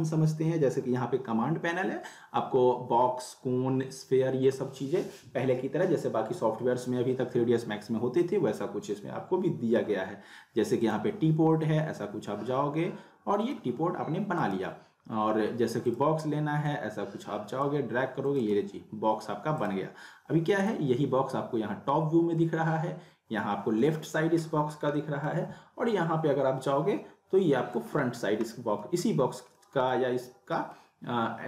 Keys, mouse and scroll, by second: 10.8-13.5 drag, 14.4 right click, 15.8-17.9 drag, 18.4 right click, 19.6 click, 21.9 scroll up 1, 24.9 middle click, 25.5 scroll up 1, 27.6 scroll down 2, 27.7 middle click, 28.5 middle click, 29.0 scroll up 1, 29.5-30.2 middle click, 30.1-30.5 scroll up 1, 30.5 middle click.